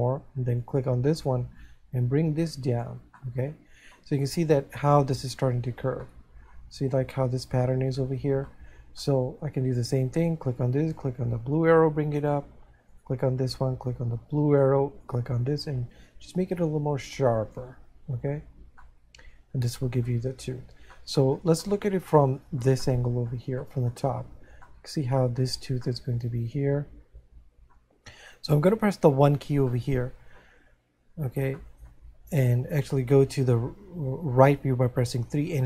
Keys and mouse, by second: 2.2 click, 3.6 middle click, 6.3 middle click, 10.9 click, 12.9 right click, 14.1 click, 16.0 click, 18.8 middle click, 21.0 middle click, 25.0 middle click, 26.5 middle click, 29.8 middle click.